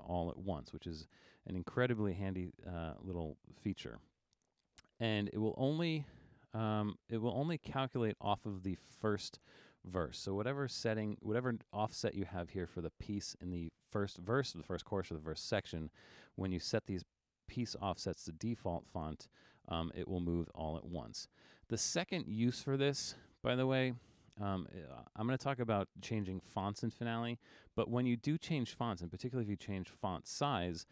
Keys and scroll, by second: 11.0 5.